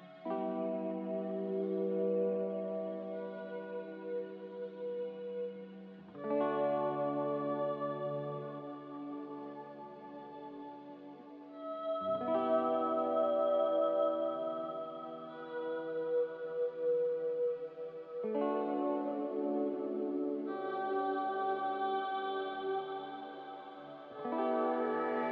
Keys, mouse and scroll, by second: 5.0 g, 11.0 c, 23.8 a, 24.2 ctrl+c, 24.4 ctrl+r.